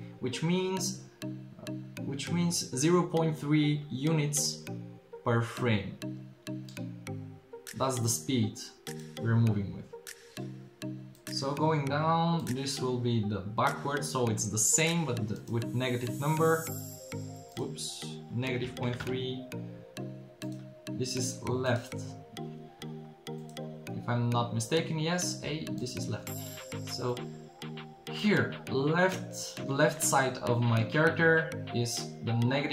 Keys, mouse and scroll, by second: 8.1-11.1 drag, 15.4-16.5 drag, 17.5-20.4 drag, 25.8 click, 26.5-27.6 middle drag, 27.9 middle click.